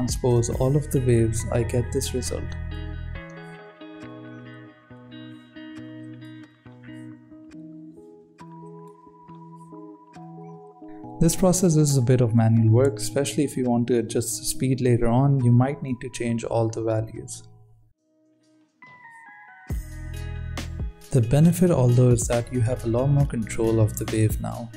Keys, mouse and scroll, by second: 0.5 click, 1.3-2.7 drag, 12.9 click, 13.5 click, 13.6 scroll down 3, 13.8 shift+middle drag, 14.0-16.6 typing, 14.2 ctrl+3, 14.5 right drag, 14.6 Tab, 16.8 Tab, 16.9 Tab, 17.0 ctrl+r, 17.2 Tab, 18.8 click, 19.2 click, 19.9-24.2 drag.